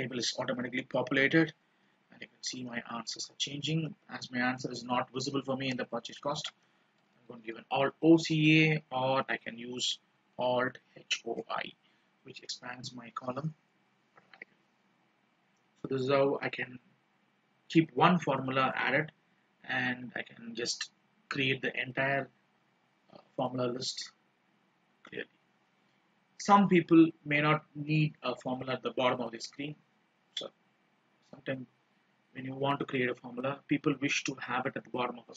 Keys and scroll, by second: 1.4 ctrl+d, 6.7 alt+o, 7.3 alt+c, 7.5 alt+a, 9.4 ctrl+z.